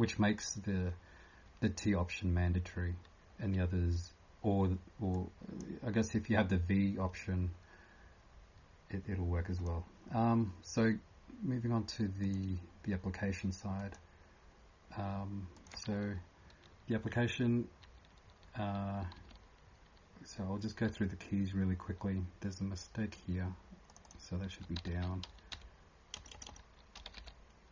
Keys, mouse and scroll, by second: 5.1 click, 9.5 click, 12.2 click, 13.8 click, 15.5 click, 23.9 click, 24.0 click, 24.3-27.7 typing.